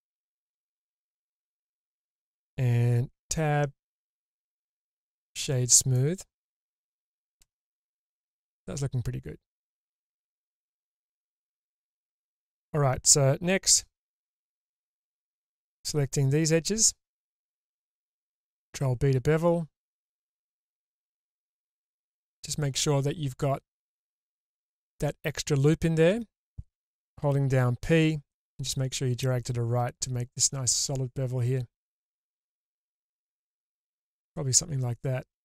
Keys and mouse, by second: 2.0-3.1 drag, 3.1 Tab, 4.1-5.0 right drag, 5.9 middle drag, 6.1-6.8 drag, 7.4 shift+space, 7.9-11.8 drag, 12.1 Tab, 13.7 2, 14.3 alt+middle click, 18.6 ctrl+b, 34.5-35.3 middle drag.